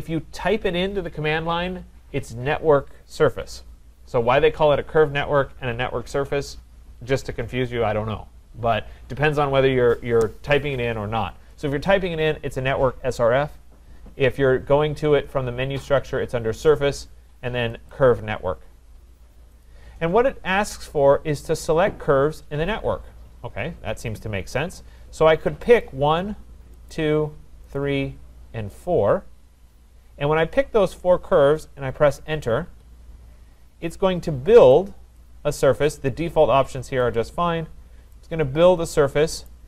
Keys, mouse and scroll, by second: 17.9 click, 19.6 click, 25.8 click, 26.9 click, 27.8 click, 28.8 click, 32.7 Return, 35.2 click, 37.1 click, 37.6-39.4 scroll, 39.4 right click.